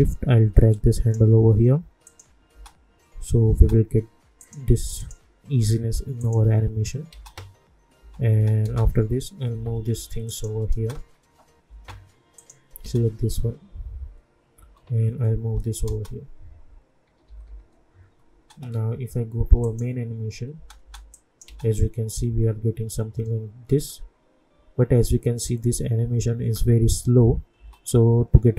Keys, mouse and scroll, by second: 2.5 space, 4.4 click, 7.1 space, 9.5 [, 10.2 click, 10.7 space, 12.3 click, 12.8 space, 14.5 space, 15.3 [, 15.8 space, 17.0-18.3 typing, 19.6 click, 20.5 space, 21.1 click, 21.4 space, 27.5 space.